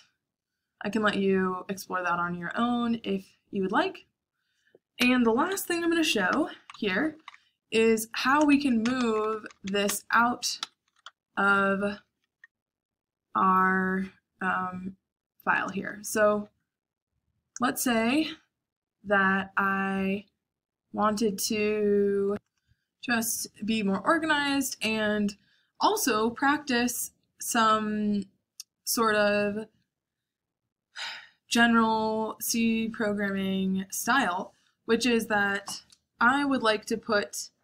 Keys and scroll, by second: 5.4 Escape, 6.0-7.2 typing, 8.4-12.2 typing, 10.5 Escape, 16.0 shift+;, 17.4 Return.